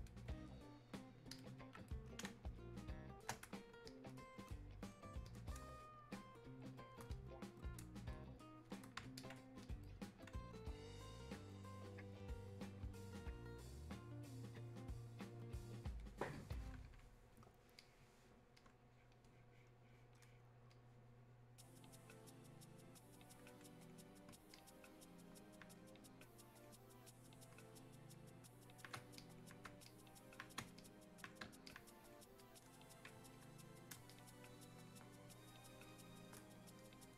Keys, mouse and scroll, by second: 2.3 space, 2.7 click, 2.8 space, 3.8-37.1 shift+drag.